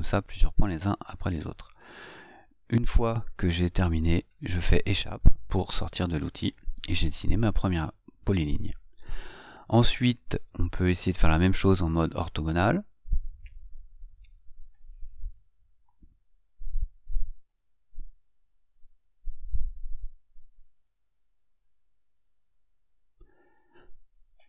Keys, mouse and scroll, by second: 1.9 click, 5.4 Escape, 13.9 click, 17.8 F8, 19.3 click, 21.1 click, 23.8 click.